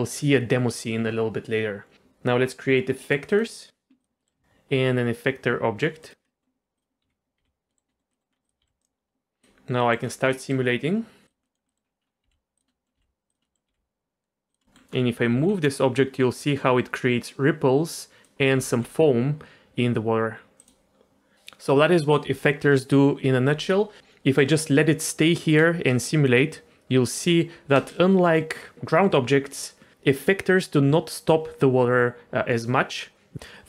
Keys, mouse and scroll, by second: 3.3 click, 4.0 click, 4.2 middle click, 4.7 shift+a, 6.2 middle click, 6.8 click, 7.0 g, 7.4 g, 7.7 middle click, 7.9 middle click, 8.1 middle click, 8.3 scroll up 2, 8.4 click, 8.6 g, 9.4 click, 9.8 middle click, 10.0 scroll down 2, 10.3 middle click, 11.2 click, 11.5 middle click, 11.7 middle click, 11.8 scroll down 2, 12.0 scroll up 2, 12.2 g, 12.7 middle drag, 13.0 g, 13.4 middle click, 13.7 g, 14.6 middle click, 15.0 scroll up 2, 15.4 g, 18.6 g, 25.7 space, 27.8 space.